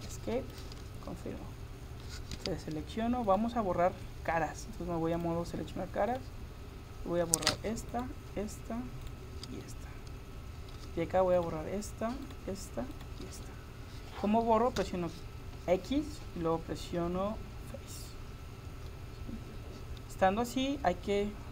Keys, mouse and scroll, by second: 0.5-2.3 drag, 2.4 a, 3.3-5.1 right drag, 5.9 right click, 6.1 click, 7.9-14.8 right drag, 14.8 x, 18.9-20.7 middle drag.